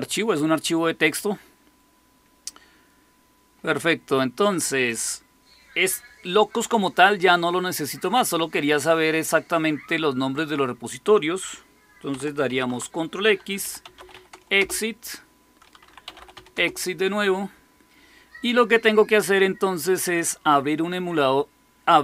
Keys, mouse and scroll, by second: 3.6 click, 4.7-12.4 drag, 12.4 ctrl+x, 13.3-14.5 typing, 15.7-16.7 typing, 19.9 click.